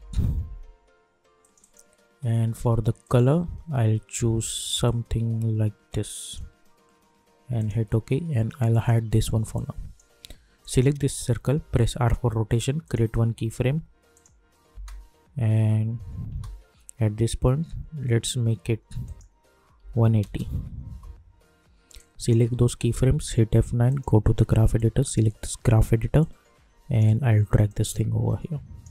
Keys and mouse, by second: 0.0-0.6 typing, 1.4-10.6 drag, 11.6 r, 12.8 click, 14.7 space, 19.0 click, 20.8 Return, 21.9 click, 23.1 F9, 23.9-28.9 drag.